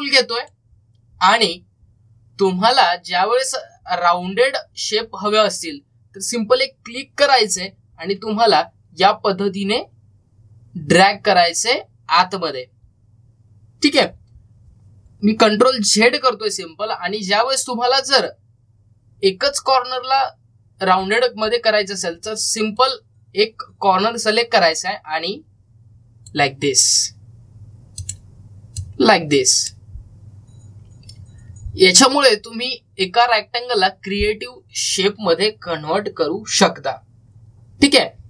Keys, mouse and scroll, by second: 4.6-5.0 scroll up 1, 8.0-16.8 drag, 16.8 ctrl+z, 23.1-32.7 drag.